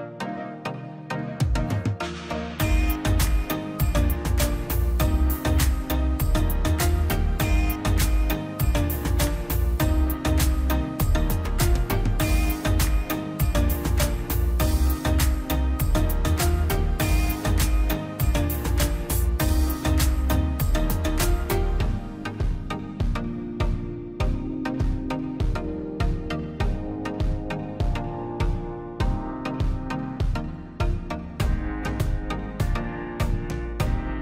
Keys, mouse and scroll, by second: 0.0 click, 0.4 scroll down 1, 1.1 click, 4.0 click, 6.7 click, 7.3-7.6 scroll down 1, 8.5 scroll up 1, 8.9 click, 13.1 click, 13.9 scroll down 1, 14.3 click, 16.0 scroll down 1, 16.2 middle click, 16.9 e, 17.0-17.3 scroll up 1, 17.3-22.2 drag, 22.2 scroll, 22.6 click, 23.2 scroll down 1, 23.4 middle click, 23.8-24.1 scroll up 1, 24.1-25.9 drag, 25.9 scroll down 1, 26.3 click, 26.8 scroll, 27.5 click, 27.6 scroll, 28.0 scroll up 1, 28.1 click, 28.3-29.0 scroll down 2, 28.7 space, 29.1 middle click, 30.0 click, 32.0 click, 32.2-32.6 scroll up 1, 32.6 click, 33.0 Escape, 33.3 click.